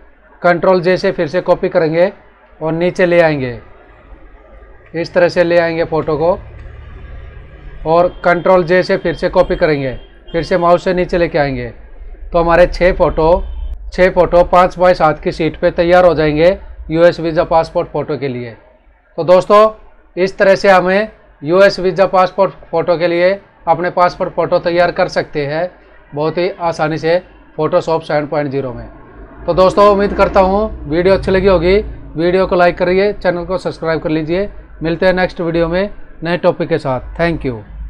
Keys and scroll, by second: 0.9 ctrl+j, 4.7 Up, 9.2 ctrl+j, 12.8 Right, 13.7 Left.